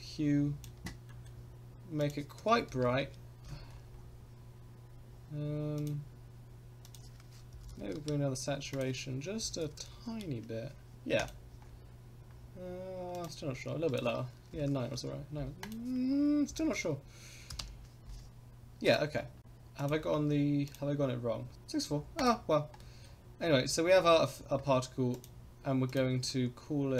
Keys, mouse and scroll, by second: 1.1 middle click, 2.0-3.5 drag, 3.7-4.1 scroll down 3, 5.7 click, 11.2 click, 11.6-12.2 scroll down 1, 12.2 scroll up 1, 13.1 click, 18.8 click, 19.1 scroll up 2, 19.8 click, 20.6 click, 21.5 click, 22.1 click, 22.8 middle drag, 23.4-24.0 scroll down 3, 24.3-25.1 scroll up 3, 25.1 click, 25.8 click, 26.9 click.